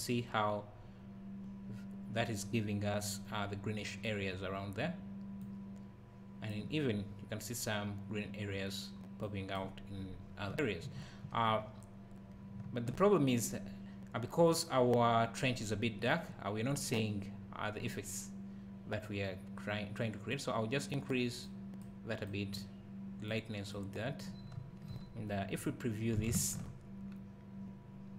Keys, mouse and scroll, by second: 0.4 scroll up 1, 0.8 scroll down 1, 5.4 click, 10.2 scroll down 1, 10.5 `, 20.3 click, 26.4 ctrl+shift+click.